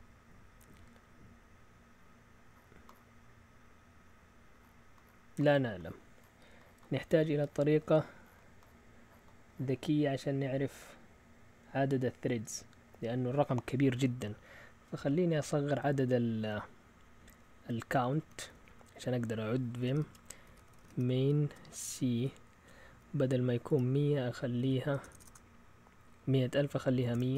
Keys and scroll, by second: 18.5 Down, 18.6-21.4 typing, 21.4 Return, 22.2 Down, 22.7-25.2 typing, 27.0 Escape, 27.1-27.3 typing.